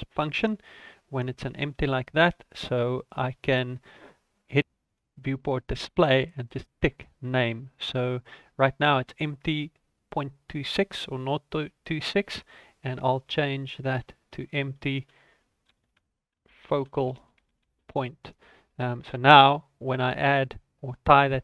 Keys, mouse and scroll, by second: 4.3 click, 4.8 click, 5.1 scroll down 3, 6.1 click, 10.6 click, 13.4 BackSpace, 14.0 BackSpace.